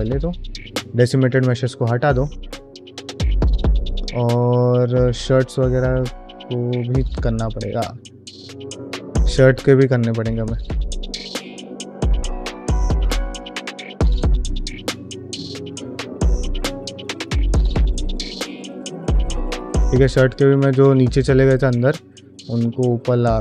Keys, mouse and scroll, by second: 1.1 click, 1.5 middle click, 1.9 ctrl+middle click, 2.3-3.3 ctrl+middle drag, 3.5 ctrl+middle click, 3.7 middle drag, 4.2 ctrl+middle click, 4.4-4.9 middle drag, 6.4-7.5 drag, 7.9 middle click, 8.3 ctrl+middle click, 8.7 shift+middle click, 9.6 Tab, 10.2 alt+z, 10.6 click, 10.9 g, 11.7 alt+z, 12.1 shift+middle click, 12.5 g, 13.6 alt+z, 14.0 click, 14.1 g, 14.8 alt+z, 15.1 middle click, 15.4 g, 15.7 q, 16.4 shift+middle click, 16.8 click, 16.9 g, 18.2 click, 18.3 g, 19.0 click, 19.1 g, 19.6 middle click, 20.2 click, 20.4 g, 20.9-22.2 middle drag, 22.6 g, 23.1 shift+middle click.